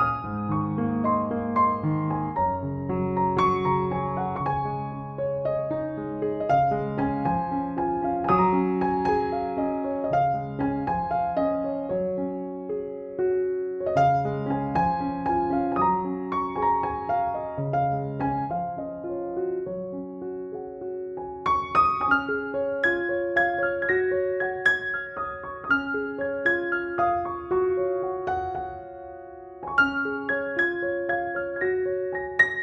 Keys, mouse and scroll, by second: 0.0 alt+click, 0.1 click, 0.5 ctrl+-, 1.4 ctrl+click, 2.2 ctrl+g, 2.6 click, 3.4 alt+click, 3.6 space, 3.7 click, 4.1 ctrl+=, 4.5 right click, 4.8 click, 5.0-5.5 [, 5.6-8.1 click, 6.5 [, 6.7-8.2 drag, 8.2 [, 8.3 [, 8.4 [, 8.5-9.8 drag, 9.7-11.3 typing, 9.8 click, 10.3 click, 10.5-10.9 click, 11.4-12.6 drag, 12.7 ctrl+=, 13.0-14.2 drag, 14.4 ctrl+=, 14.8 space, 14.8 click, 15.0 space, 16.0 ctrl+click, 16.3 ctrl+e, 16.9 ctrl+j, 17.7-18.3 [, 18.8 [, 19.4 alt+click, 20.4 ctrl+z, 20.6 space, 20.8 s, 21.3 alt+click, 21.5 click, 22.8 alt+click, 23.1 click, 23.8-24.3 alt+drag, 25.1-25.5 alt+drag, 25.7-26.3 alt+drag, 26.5 alt+click, 27.4 alt+click, 27.9 alt+click, 28.5 alt+click, 32.2 ctrl+-.